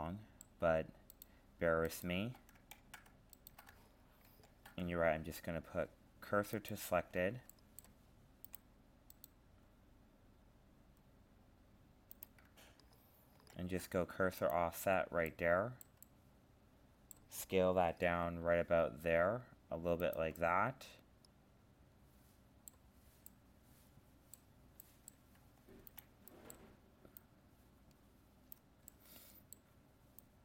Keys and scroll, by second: 2.7 ctrl+z.